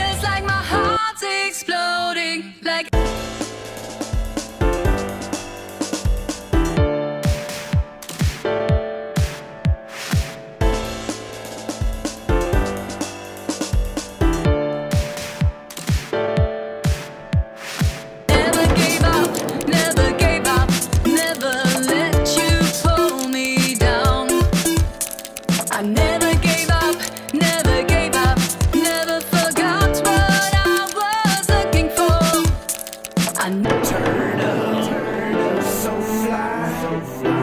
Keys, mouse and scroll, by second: 0.6-1.0 drag, 1.2 click, 2.7 ctrl+click, 6.2 ctrl+click, 7.4 ctrl+drag, 8.8 ctrl+click, 9.8 drag, 12.4 click, 13.0 click, 13.1 click, 14.5 scroll down 2, 15.2-17.0 alt+drag, 19.1 click, 20.8 click, 21.7 alt+click, 21.9 alt+click, 22.6 click, 25.2-25.6 scroll down 1, 25.6 click, 26.4 click, 28.3 click, 28.9 click, 30.2 click, 31.8 click, 32.4 click, 33.9 click, 36.7-37.4 typing.